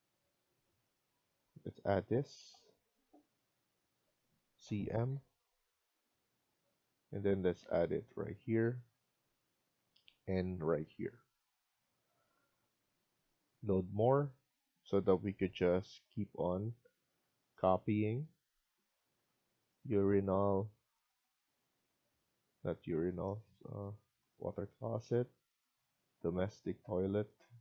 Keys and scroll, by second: 11.9 Escape, 12.2 Escape.